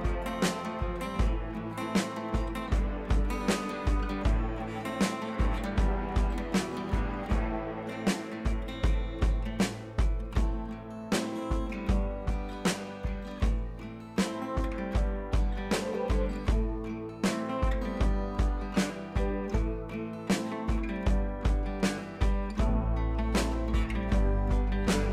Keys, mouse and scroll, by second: 1.1-1.4 click, 1.8-2.1 scroll down 2, 2.2 alt+Tab, 2.8-3.2 scroll down 2, 3.4 click, 3.8 click, 4.9 ctrl+c, 5.0 click, 5.8-6.2 scroll up 1, 9.1-9.6 drag, 14.0 ctrl+v, 15.0-18.4 drag, 19.1-19.6 scroll up 1, 19.7 click, 22.4 shift+click.